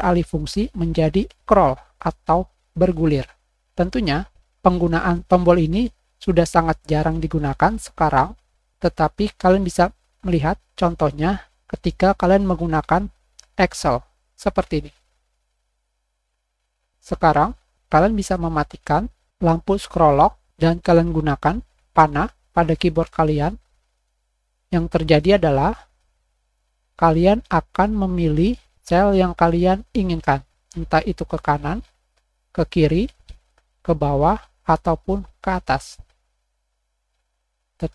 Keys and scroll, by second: 14.0-15.2 typing.